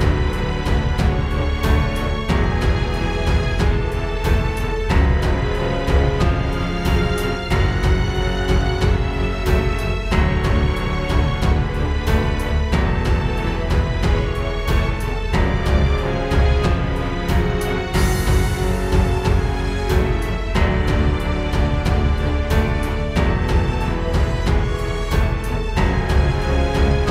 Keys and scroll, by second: 0.9 space, 1.1 space, 1.7 super+space, 1.9 super+space, 2.1 super+space, 2.5 super+space, 3.2 space, 8.7 space, 16.4 space, 16.6 space, 17.4 space, 17.9 space, 18.6 super+space.